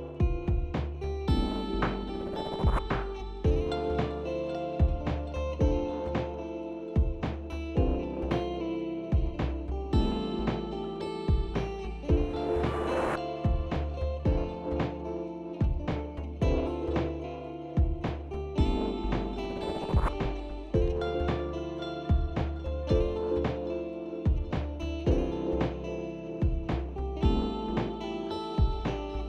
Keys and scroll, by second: 4.2 ctrl+z, 7.1 f, 12.9 s, 15.5 shift+s, 17.1 shift+s, 18.8 s, 18.9 ctrl+z, 19.4 s, 27.5 ctrl+z.